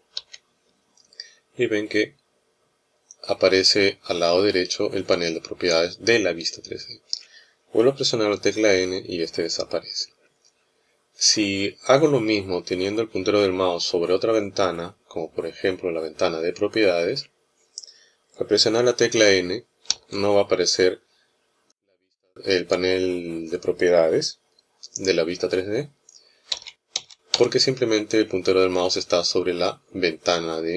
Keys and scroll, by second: 8.6 n, 19.6 n, 26.3 n, 26.7 n, 27.1 n.